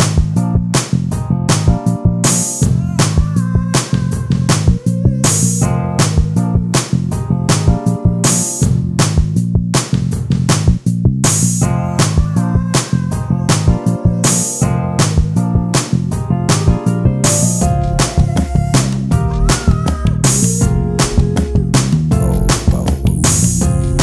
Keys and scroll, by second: 1.1 m, 3.9 ctrl+space, 4.5 t, 9.4 space, 14.2 space, 17.2 ctrl+space.